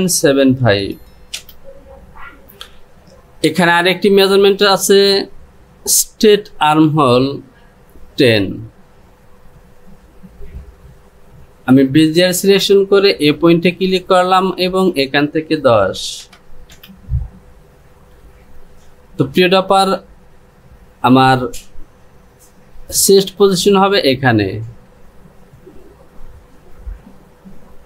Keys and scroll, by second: 10.3 ctrl+z.